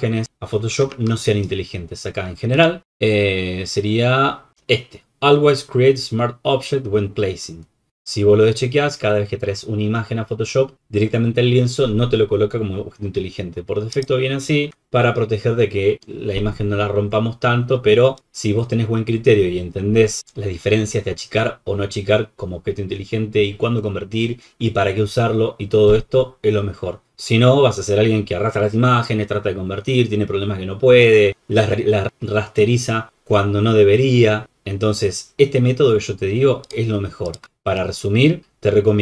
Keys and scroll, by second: 14.7 super+-, 36.8 super+-.